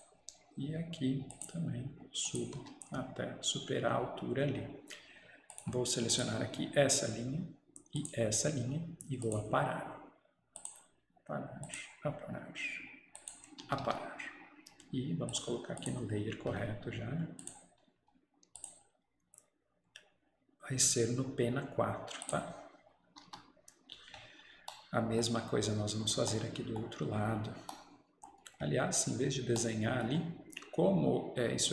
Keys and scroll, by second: 2.6 Escape, 13.8 Escape, 13.9 Escape, 23.1 Escape, 23.3 Escape.